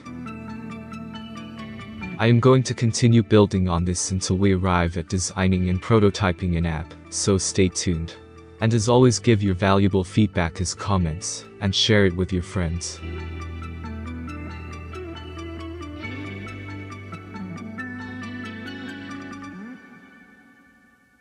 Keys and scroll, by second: 20.2 ctrl+s.